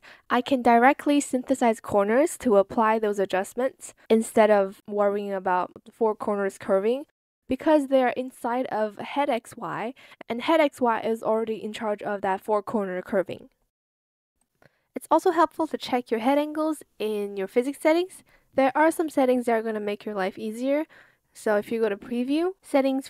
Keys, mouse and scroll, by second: 0.5 shift+click, 2.8 ctrl+z, 7.8 ctrl+z.